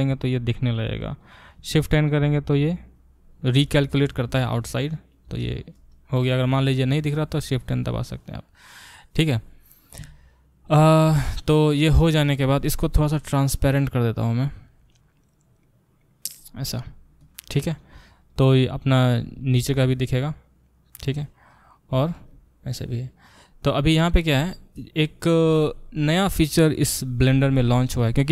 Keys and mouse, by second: 2.2 shift+n, 13.3 click, 13.5-18.2 middle drag, 18.2 click, 18.3-21.5 middle drag, 19.2 a, 19.6 g, 21.5 click, 21.9-28.3 ctrl+alt+middle drag.